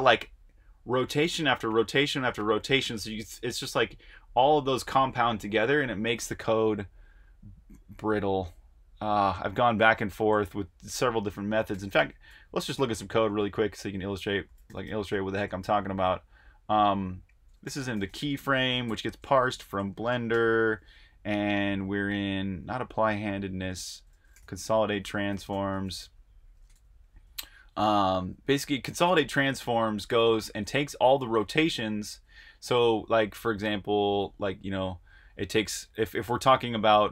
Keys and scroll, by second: 6.4 super+Tab, 8.0 super+Tab, 11.7 typing, 13.4 Escape, 13.7-14.8 typing, 17.4-20.3 typing, 22.3-28.1 typing, 29.9-30.6 typing, 32.8 super+Tab.